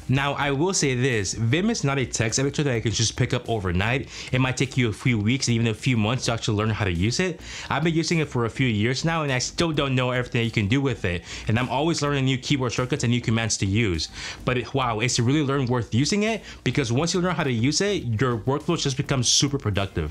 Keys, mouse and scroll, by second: 0.0-8.0 typing, 12.2-12.9 typing, 14.4-15.2 typing, 19.3 Escape, 19.3-20.1 typing.